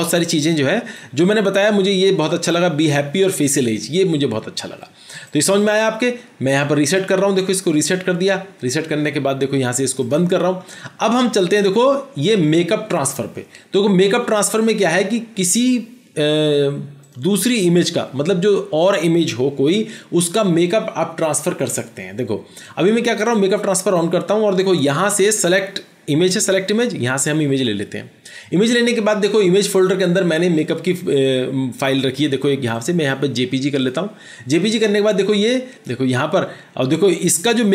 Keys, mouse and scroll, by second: 35.8 double click.